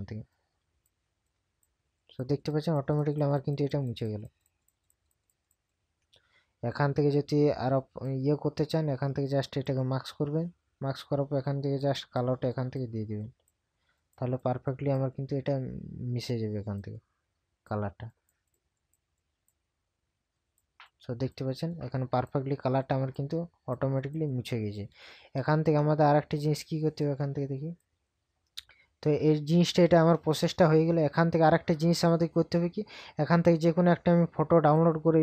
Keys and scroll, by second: 29.1 ctrl+KP_Subtract.